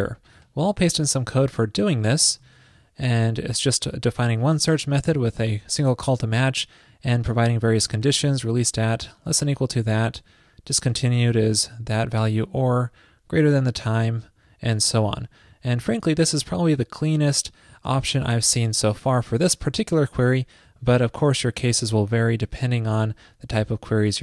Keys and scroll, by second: 2.5 super+v.